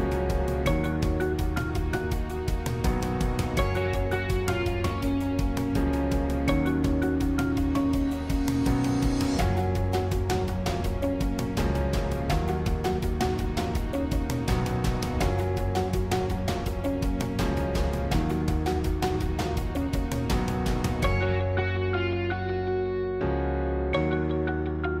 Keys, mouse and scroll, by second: 0.7 click, 0.9 g, 2.5 middle click, 3.3 scroll down 2, 3.5-5.0 middle drag, 5.0-6.7 scroll up 2, 6.7 Tab, 8.7 click, 9.4-12.4 middle drag, 12.4-12.7 scroll up 1, 12.7-13.9 middle drag, 13.9-15.6 scroll down 1, 15.6 scroll down 1, 15.7 r, 23.6 scroll down 1, 23.7-25.0 middle drag.